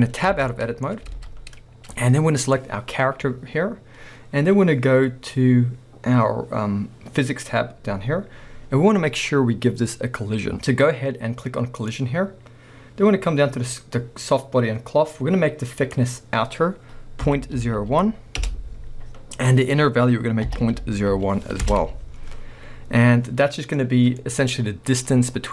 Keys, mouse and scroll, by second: 0.3 Tab, 1.0 scroll up 1, 1.2 alt+a, 2.4 click, 7.4 click, 11.8-24.2 drag, 18.5 Return, 21.7 Return, 24.2-25.5 middle drag, 24.4-25.0 scroll up 2.